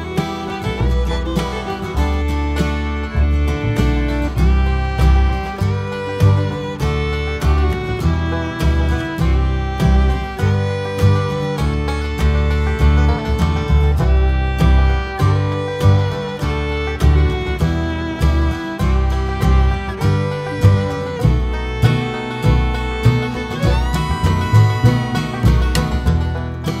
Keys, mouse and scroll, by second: 1.2 scroll down 1, 3.2 ctrl+j, 4.0 click, 4.3 x, 4.7 click, 5.2 Tab, 5.7 click, 6.2 shift+click, 6.7 ctrl+l, 7.9 click, 8.5 ctrl+l, 9.9 Tab, 10.6 click, 10.9 x, 11.1 click, 11.2 Tab, 11.4 click, 11.9 ctrl+l, 14.3 Tab, 14.5 click, 14.7 x, 14.8 click, 14.9 Tab, 15.1 click, 15.6 ctrl+l, 17.7 click, 17.8 shift+click, 18.5 ctrl+l, 21.0 Tab, 21.2 click, 21.5 x, 21.6 scroll down 1, 21.9 click, 22.7 KP_Decimal, 22.9-23.3 scroll down 1, 23.3 scroll up 1, 23.5 x, 23.9 click, 23.9 Tab, 24.1 click, 24.7 ctrl+l, 26.1 Tab, 26.3-26.8 scroll down 2, 26.4 alt+a.